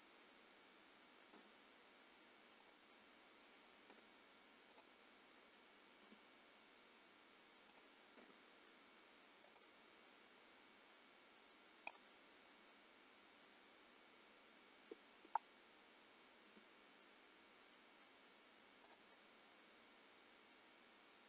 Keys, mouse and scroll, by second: 1.5 g, 2.9 middle click, 4.0 g, 5.0 middle click, 6.2 r, 8.2 g, 9.8 middle click, 12.1 click, 12.5 middle click, 16.6 r, 19.2 middle click.